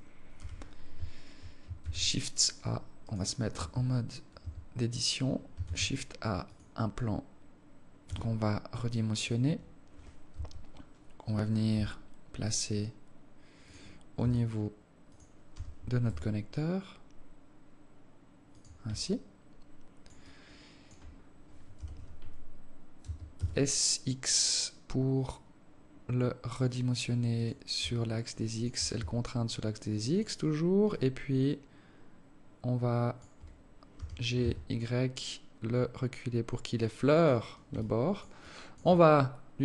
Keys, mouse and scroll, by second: 0.5 z, 2.0 shift+a, 3.2 right click, 3.7 Tab, 4.6 a, 5.8 shift+a, 8.3 s, 10.5 KP_3, 11.9 g, 14.4 s, 15.7 g, 19.3 alt+click, 20.5 alt+click, 21.3-22.5 scroll up 6, 21.9 z, 23.2 s, 28.2 alt+click, 29.1 s, 31.1 alt+click, 34.1 g, 37.9 alt+click, 38.7 alt+click.